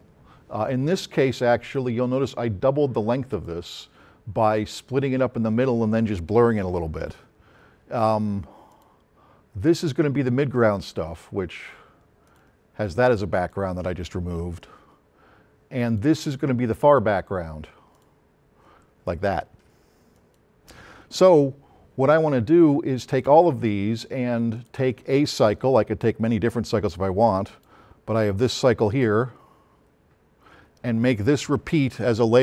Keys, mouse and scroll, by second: 3.3 click, 8.7 click, 12.3 click, 13.5 click, 15.9 click, 24.6 click, 26.9-27.7 drag.